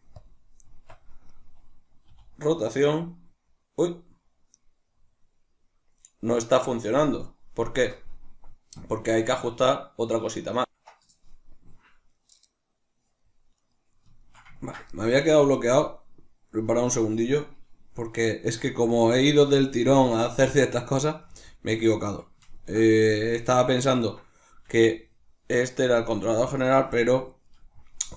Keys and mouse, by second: 1.3 right click, 2.1 r, 6.1 right click, 13.5 right click, 14.1-15.6 shift+middle drag, 15.6 right click, 18.4 g, 19.1 right click, 21.2 g, 21.9 right click, 22.4-23.6 ctrl+middle drag, 23.0 g, 23.6 right click, 23.9-25.8 ctrl+middle drag, 24.5 g, 25.8 right click, 27.3 right click.